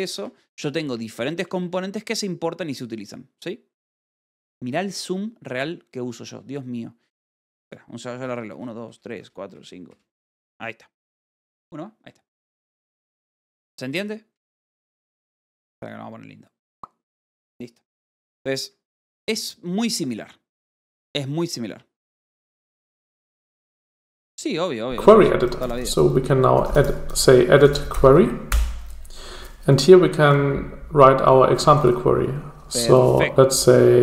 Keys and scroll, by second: 0.5 n, 2.4 0, 6.8 =, 7.7 1, 10.8 =, 14.5 -.